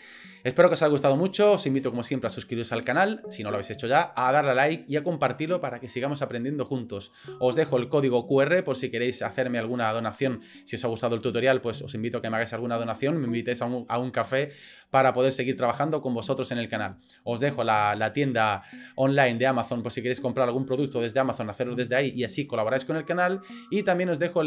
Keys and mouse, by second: 5.6 middle click, 16.2 click, 16.2 middle click, 16.2 right click.